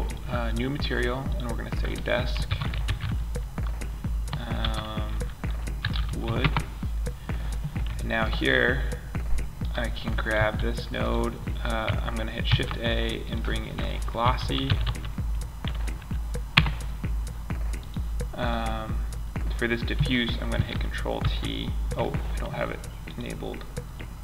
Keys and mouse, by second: 2.6-5.7 middle drag, 5.4 o, 7.2-8.9 drag, 8.9 right click, 9.7 g, 10.1 click, 11.8 shift+a, 14.2 s, 20.5 ctrl+t.